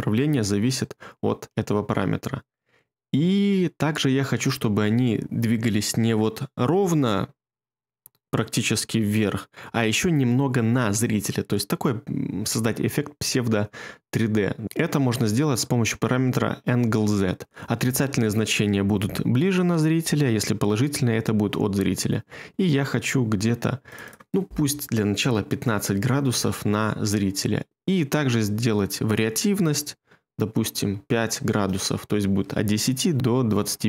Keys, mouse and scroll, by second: 24.9-25.8 typing, 26.3 Return, 30.8 5, 31.5 Return.